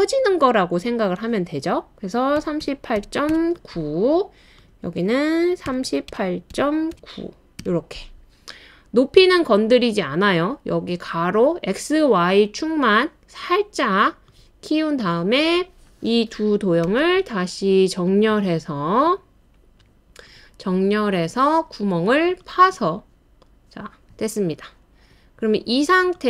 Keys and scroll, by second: 2.1-3.8 typing, 5.4-7.6 typing, 16.9 typing, 22.6-24.7 typing.